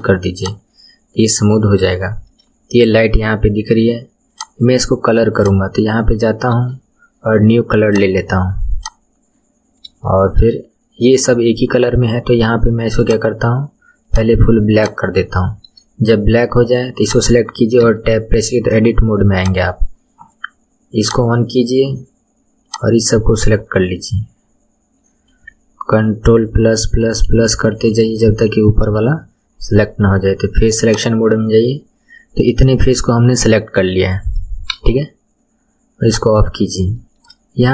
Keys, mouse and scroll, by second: 0.0 right click, 0.4 click, 1.5 scroll down 2, 2.0 shift+middle click, 2.2-3.7 shift+scroll down 3, 4.3 click, 5.4 click, 7.8-9.7 drag, 9.7-10.1 scroll down 1, 10.1-13.0 shift+middle drag, 13.0 click, 14.7 click, 15.4 shift+middle click, 16.2-17.0 scroll up 4, 17.0 click, 17.8 Tab, 19.4 click, 21.0-22.3 drag, 22.7 click, 26.3 ctrl+KP_Add, 26.6 ctrl+KP_Add, 27.4 ctrl+KP_Add, 27.9 ctrl+KP_Add, 30.8 click, 31.7-32.2 scroll down 2, 32.2-34.7 middle drag, 34.7 KP_1, 36.0 click, 36.6-37.0 scroll down 1, 37.0-37.7 shift+middle drag.